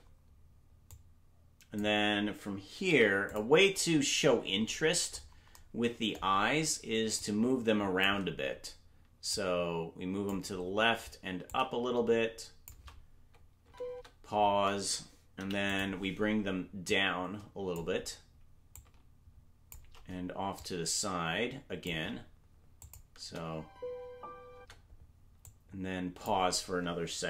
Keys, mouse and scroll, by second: 0.9 click, 0.9 space, 2.8 i, 4.6-5.5 scroll up 4, 5.5-5.9 scroll up 6, 7.2 click, 9.3-10.3 drag, 11.4-12.6 drag, 13.6 space, 15.3 space, 15.3 i, 16.8 click, 18.7-19.7 shift+drag, 20.5-21.8 shift+drag, 22.8 click, 23.2 space, 25.4 click, 25.4 space.